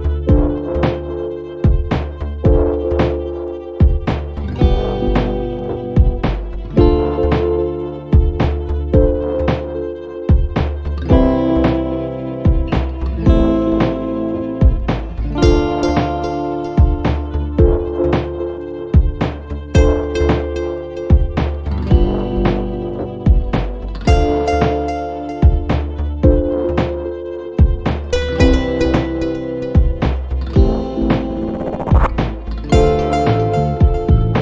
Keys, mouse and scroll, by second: 0.2 click, 1.4 scroll up 2, 2.2-3.9 drag, 4.3-6.1 typing, 6.7 scroll up 2, 7.8 scroll down 2, 8.3-9.9 scroll up 4, 9.9-16.1 drag, 17.0 click, 17.5 click, 18.6 click, 22.2 click, 23.5 click, 25.4 click, 26.7-28.2 drag, 30.0 click, 30.6 click, 32.0 click, 32.7-33.1 scroll down 1, 33.4-34.4 drag.